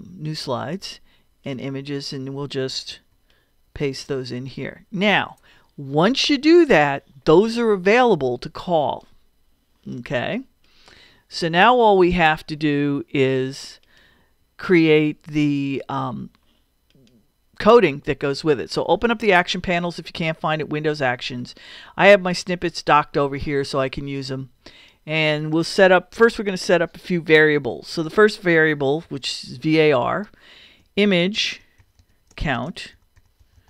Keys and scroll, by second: 29.0 v, 30.8-33.6 typing.